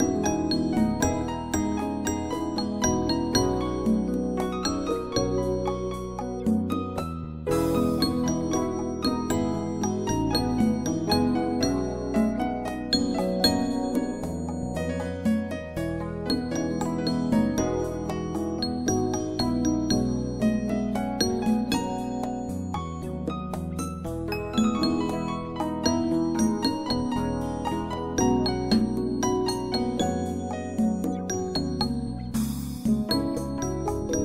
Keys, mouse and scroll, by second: 4.7 click, 7.8 click, 10.3 click, 12.2 right click, 12.6 click, 14.5 click, 17.8 click, 22.0 click, 23.9 click, 30.2 typing, 30.7 Return, 32.0 typing, 33.2 click.